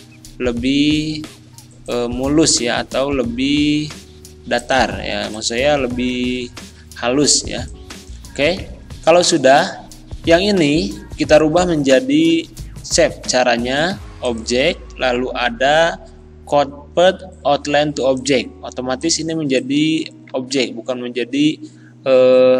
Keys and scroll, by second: 20.6 ctrl+z.